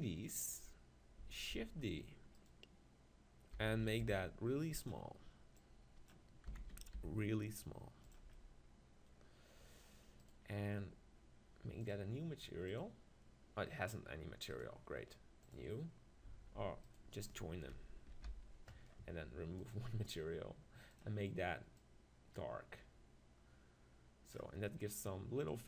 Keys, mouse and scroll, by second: 1.5 shift+d, 2.5-4.3 drag, 3.6 s, 4.9-7.5 drag, 6.5 s, 8.1-10.1 drag, 10.2-12.9 right drag, 12.9-14.6 drag, 14.5-16.4 right drag, 15.5 click, 16.9 click, 16.9 right click, 17.3-18.8 right drag, 18.2 ctrl+j, 19.7-23.2 right drag, 24.7-25.6 middle drag, 25.5-25.6 right drag.